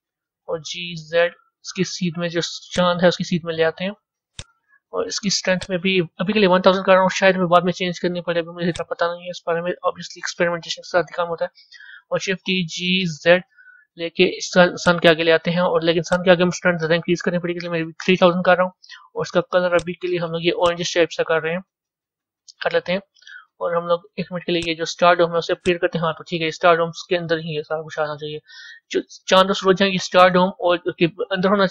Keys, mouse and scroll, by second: 0.3 g, 4.2 click, 5.4-6.6 drag, 6.6 KP_0, 6.7 KP_0, 8.6-11.6 drag, 12.4 shift+d, 15.9-17.1 drag, 17.1 KP_0, 17.3 KP_0, 19.6 click, 23.1 a, 24.4 click, 25.5 click, 29.6-31.7 middle drag.